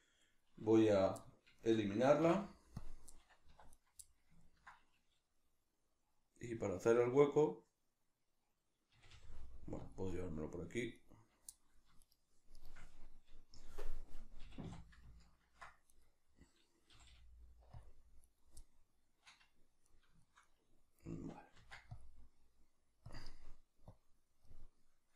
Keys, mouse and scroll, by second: 2.2 x, 3.5 1, 3.7 right click, 4.0-9.9 middle drag, 8.9 g, 9.9 click, 11.0 right click, 11.5 middle click, 12.0 shift+right click, 12.6 shift+right click, 14.4 g, 15.1 ctrl+click, 15.9 right click, 16.9 g, 17.8 click, 18.2 right click, 18.6-23.2 middle drag, 21.6 ctrl+r, 23.2 click, 23.9 click, 24.4-25.1 middle drag.